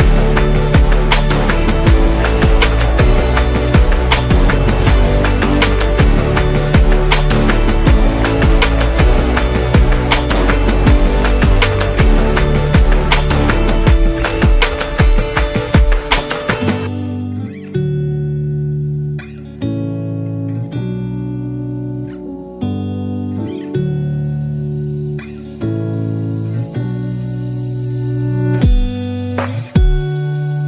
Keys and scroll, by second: 16.8 Return, 27.3 space, 28.7 super+g.